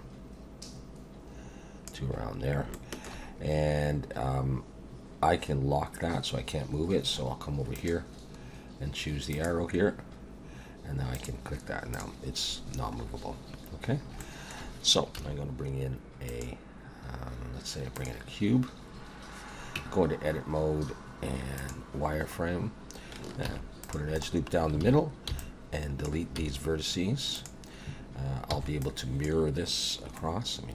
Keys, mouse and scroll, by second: 2.7 shift+middle click, 6.6-7.7 scroll down 4, 7.7 click, 7.7-8.5 scroll down 2, 11.1 click, 11.9 click, 12.5 scroll down 1, 13.1-13.5 scroll up 5, 13.9 scroll down 2, 14.2 shift+middle click, 15.2 shift+a, 19.8 Tab, 21.6 click, 22.3 scroll up 2, 23.5 ctrl+r, 24.8 alt+a, 25.3 b, 26.4 x, 28.5 b, 30.2 middle click.